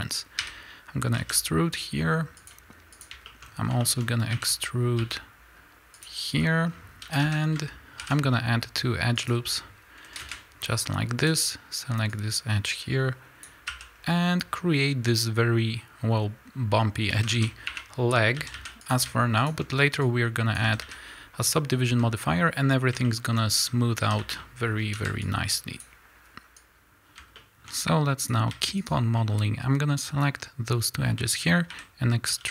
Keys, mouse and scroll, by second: 0.4 e, 2.9 click, 3.3-6.0 shift+middle drag, 3.4-3.8 scroll up 2, 4.3 e, 6.0 click, 6.4-6.7 scroll down 2, 6.7-7.0 scroll up 2, 7.0 a, 8.0 ctrl+r, 10.3 KP_Enter, 11.2 click, 12.1-18.9 drag, 13.7 a, 14.0-16.0 scroll down 2, 16.0-16.9 scroll up 2, 16.9 scroll up 1, 17.2 a, 17.7 1, 18.4 a, 19.4 shift+click, 20.0-23.0 drag, 20.6 a, 21.1-21.9 scroll down 2, 21.9 a, 23.0 shift+middle click, 23.6-24.0 scroll down 2, 24.0 a, 25.0 r, 26.5 b, 26.6 click, 26.8-27.3 scroll up 2, 27.3 shift+middle click, 27.6-28.2 scroll up 2, 28.2 click, 28.8 shift+click, 29.1-32.5 shift+middle drag, 30.2 scroll down 2, 30.6 scroll up 1, 31.6 e.